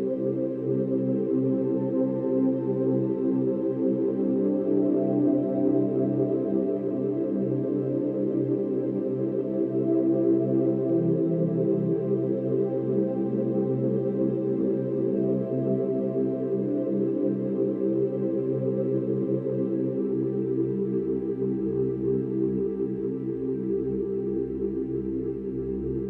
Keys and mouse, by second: 1.3 space, 3.1 ctrl+s, 4.1-4.4 ctrl+alt+drag, 5.1-7.2 alt+drag, 8.4-10.2 ctrl+alt+drag, 10.2 0, 11.1 ctrl+alt+click, 12.3 click, 13.0 click, 15.5 /, 16.6-17.6 ctrl+alt+middle drag, 16.9 ctrl+alt+click, 17.4 0, 18.3-21.7 ctrl+alt+middle drag, 18.5-19.6 ctrl+alt+drag, 19.7 click, 20.3 click, 21.1 click, 21.6 typing, 21.7-23.1 drag, 23.1-23.6 typing.